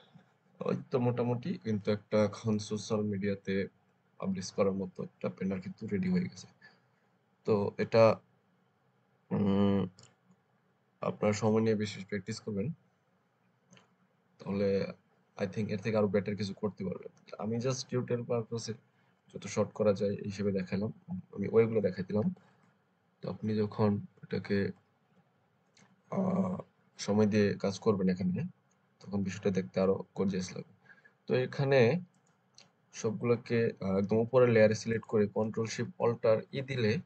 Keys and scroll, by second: 36.4 ctrl+alt+shift+e.